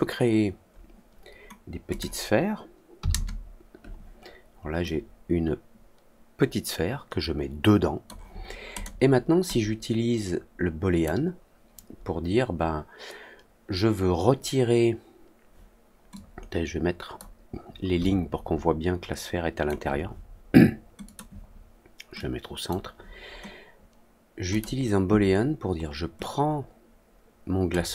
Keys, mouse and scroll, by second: 1.8 click, 4.8-8.0 drag, 8.7 click, 9.4-11.0 drag, 16.1-17.1 drag, 17.9-19.6 alt+drag, 21.0 click, 22.1-22.6 drag, 24.4 click, 26.1-27.6 drag.